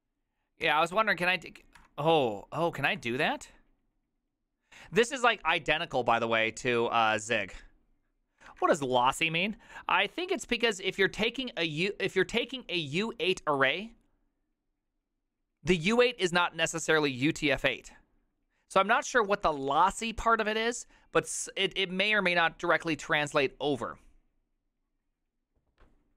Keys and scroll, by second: 8.6 alt++.